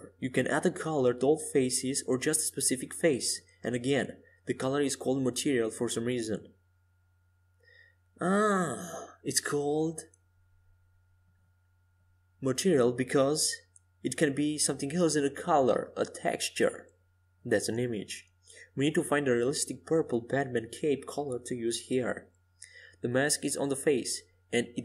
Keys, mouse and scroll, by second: 0.1 s, 4.9 KP_5, 6.1 middle click, 7.7-8.9 middle drag, 11.6-14.1 middle drag, 19.4-22.1 middle drag, 21.2-23.5 drag, 22.3-24.8 middle drag.